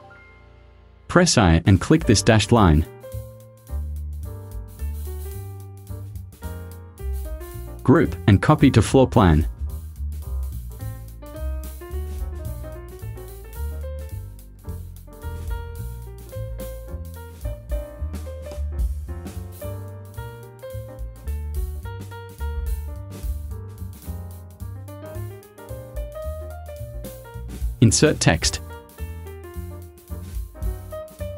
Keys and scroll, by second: 1.3 i, 4.8 v, 15.9 r, 22.3 Down.